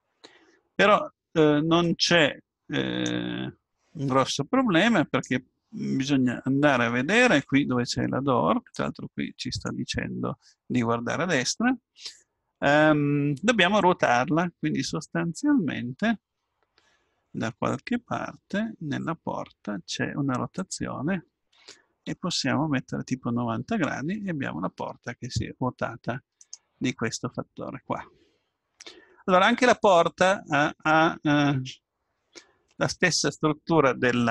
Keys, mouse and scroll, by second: 1.8-3.8 drag, 8.7-10.4 drag, 20.5-22.5 drag, 28.3-28.9 scroll up 1, 28.9-32.0 middle drag.